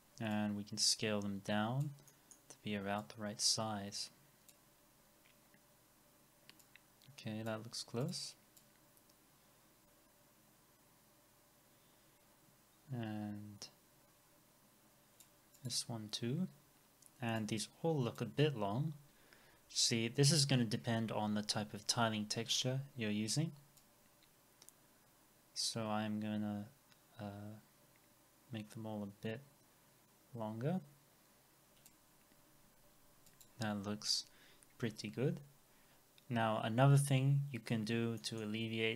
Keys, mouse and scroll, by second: 2.1 middle click, 5.0 scroll up 1, 16.6 scroll down 1, 35.2 scroll down 1, 37.5-38.2 scroll down 1, 38.2 middle click.